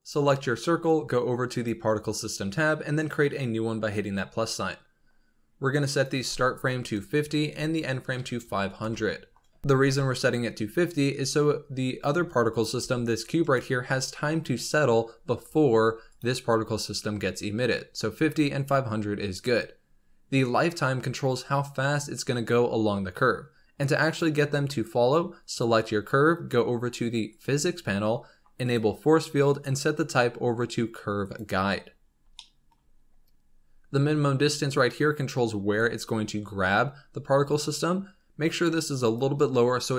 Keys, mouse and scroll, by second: 1.4 click, 2.9-8.3 drag, 8.3 KP_0, 11.1-12.4 scroll down 7, 12.4 click, 12.7 g, 15.4-16.0 scroll up 4, 16.0 click, 19.0-21.0 scroll up 4, 21.0-22.3 scroll down 4, 24.0 click, 27.2 click, 28.5-31.8 drag, 31.8-32.2 scroll up 3, 32.2-32.7 shift+middle drag, 32.7-33.3 scroll up 3, 34.4-37.4 drag.